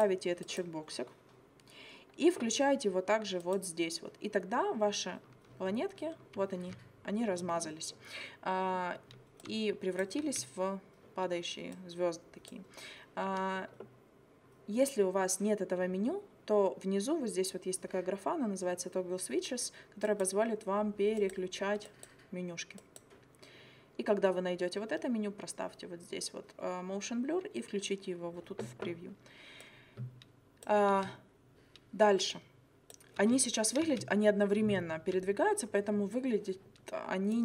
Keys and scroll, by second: 10.2 space, 30.9 space, 33.2 space.